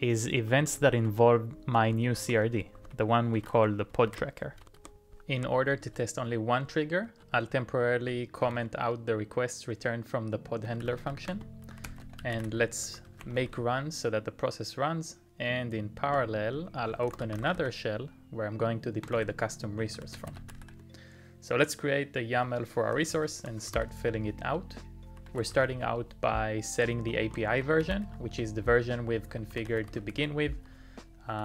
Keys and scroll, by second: 0.4-9.1 typing, 10.4-14.0 typing, 15.9-17.6 typing, 18.9-21.1 typing, 22.3-31.4 typing.